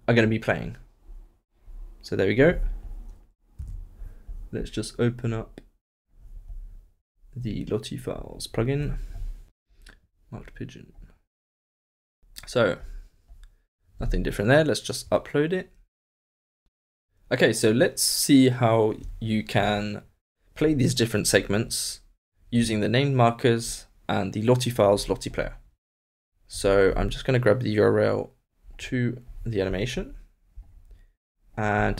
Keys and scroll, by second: 3.7 super+s.